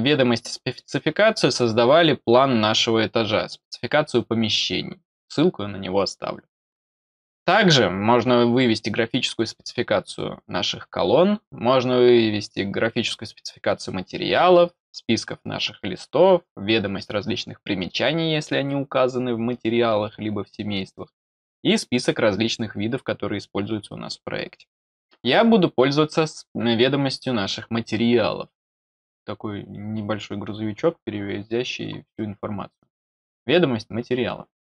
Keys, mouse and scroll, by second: 32.8 click.